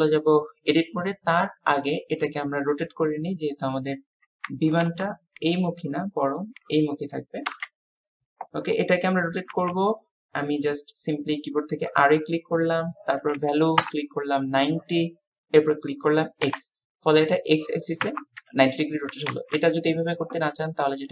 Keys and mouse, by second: 19.4 ctrl+z.